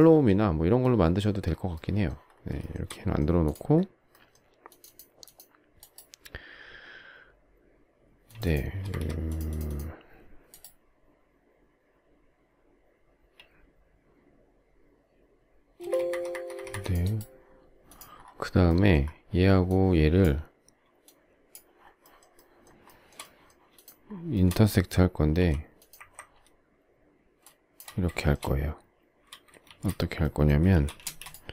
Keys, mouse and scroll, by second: 2.6 shift+middle click, 8.7 space, 8.9 Escape, 15.7 space, 15.8 Escape, 21.0 shift+click, 21.8 shift+scroll, 22.0 shift+middle click, 22.3 shift+middle click, 22.8 shift+middle click, 23.8 shift+click, 24.3 shift+middle click, 25.3 m, 28.1 shift+middle click, 29.6 shift+x, 30.7 shift+c, 31.0 space.